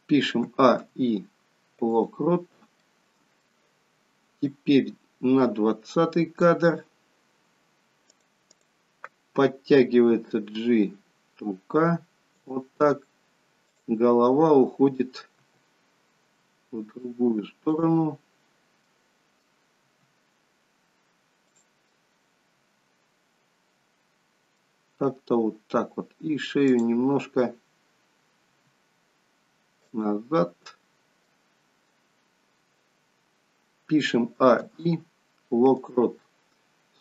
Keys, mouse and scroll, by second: 0.4 a, 0.7 i, 2.8 middle click, 4.6 click, 8.4 click, 9.9 g, 13.7 click, 15.5 r, 18.8 middle click, 19.8 r, 21.9 middle click, 26.7 click, 28.4 r, 31.3 middle click, 34.6 a, 34.6 i.